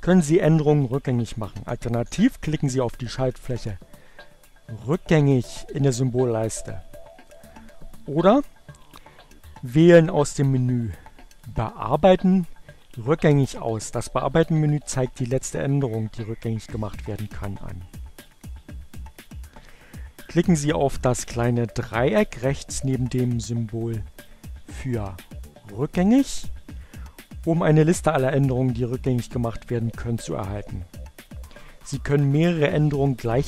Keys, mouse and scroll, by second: 7.6 click, 11.3 click, 17.8 click, 25.0 click.